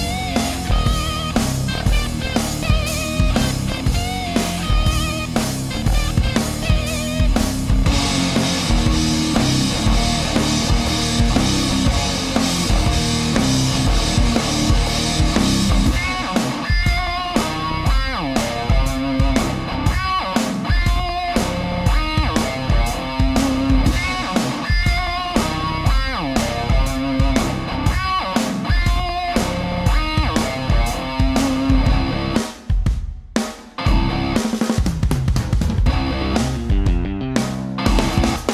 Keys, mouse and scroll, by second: 0.8-1.7 middle drag, 2.2-5.2 middle drag, 6.5 right click, 8.5 shift+right click, 9.1 shift+right click, 10.1 shift+right click, 10.7 shift+right click, 11.3 shift+right click, 11.7 shift+right click, 12.2-14.3 shift+middle drag, 14.7-16.5 drag, 16.7-17.3 middle drag, 17.7 right click, 18.3-19.6 drag, 19.8 right click, 20.3-22.0 drag, 22.1-27.8 middle drag, 28.3 right click, 29.0 shift+right click, 29.7-31.8 drag, 31.8-34.2 middle drag, 34.2 click, 35.6 scroll down 1, 36.8-38.5 drag.